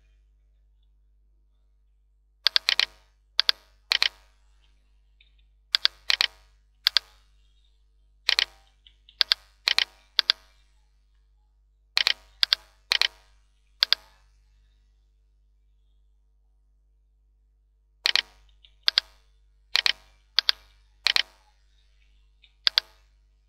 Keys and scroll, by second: 0.3 ctrl+=, 3.1 e, 4.7 ], 8.6 [, 12.2 [, 18.2 [, 20.0 [.